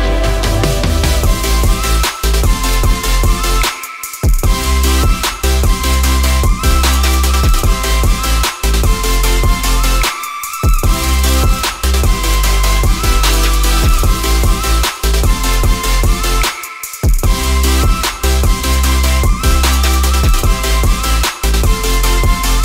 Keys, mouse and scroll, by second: 4.2 alt+right click, 7.2-8.3 typing, 11.8 ctrl+0, 12.0 ctrl+alt+scroll down 1.